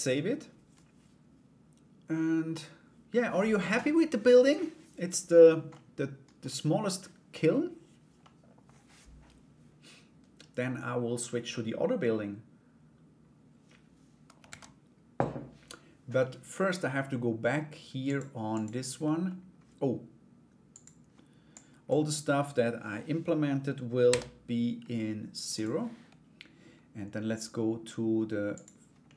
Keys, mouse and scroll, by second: 5.3 middle click, 7.8 middle click, 14.0 ctrl+s, 17.6 click, 18.1 click, 18.6 middle click, 20.3 click, 21.2 click, 28.1 click, 28.6 middle click.